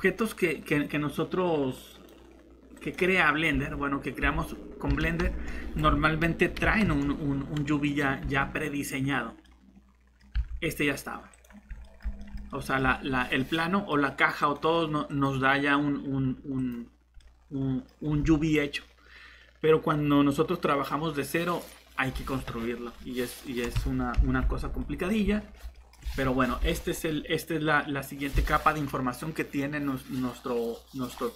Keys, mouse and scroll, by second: 3.5 Tab, 4.2 Tab, 4.9 a, 5.2 x, 5.8 Escape, 6.6 s, 7.0 x, 8.2 Tab, 10.3 Tab, 24.1-26.0 typing.